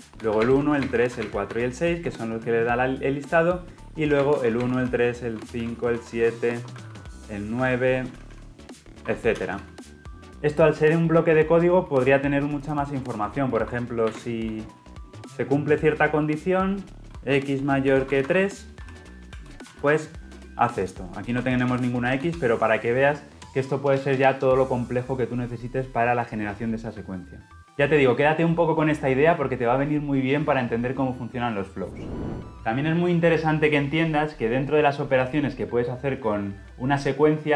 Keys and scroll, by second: 17.0 ctrl+z, 22.1 ctrl+alt+l, 24.8 ctrl+alt+o, 27.6 ctrl+z.